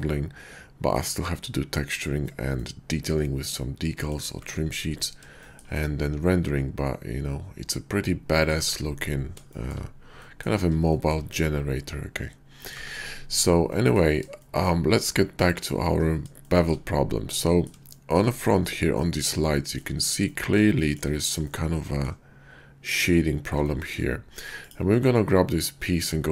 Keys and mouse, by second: 2.5-4.1 middle drag, 5.3 shift+middle drag, 5.8-6.5 middle drag, 7.0-8.5 middle drag, 9.5 shift+middle drag, 10.2 middle drag, 10.8 shift+middle click, 11.3-12.7 middle drag, 13.6-14.0 middle drag, 14.4 shift+middle drag, 15.3 KP_5, 16.4 shift+middle drag, 17.3 middle click, 17.4 click, 17.9 shift+middle click, 18.9-19.3 middle drag, 19.5 shift+middle drag, 20.2 middle drag, 20.7 shift+middle drag, 21.4-22.1 middle drag, 23.6-23.9 shift+middle drag, 24.6 click.